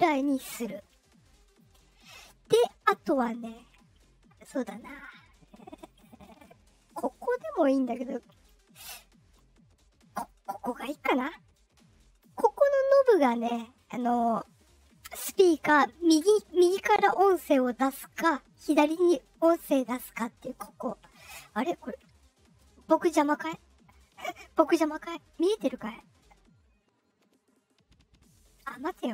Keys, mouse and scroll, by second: 7.1-8.4 drag, 10.2-12.1 drag, 17.4-28.6 drag.